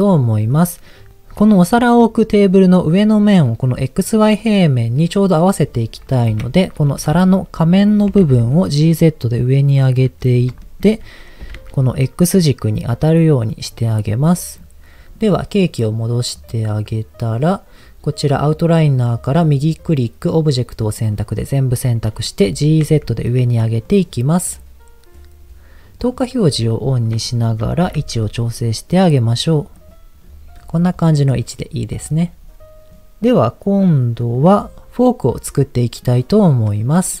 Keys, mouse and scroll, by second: 6.4 KP_1, 8.0 g, 8.2 z, 9.8 click, 10.2 scroll up 2, 10.6 shift+middle click, 10.8 scroll up 1, 11.4 g, 11.6 z, 13.4 click, 13.9-14.5 scroll down 2, 14.5-15.1 scroll down 1, 16.9 click, 18.8 click, 19.4-22.4 right drag, 22.4 g, 22.8 z, 23.8 click, 26.0 click, 26.6-27.1 scroll up 3, 27.2 shift+middle click, 27.8 g, 28.0 z, 29.8 click, 30.2-30.6 scroll down 1, 30.8 scroll down 2, 31.0 click, 31.3 middle click, 36.4 click, 36.8-37.2 scroll down 2.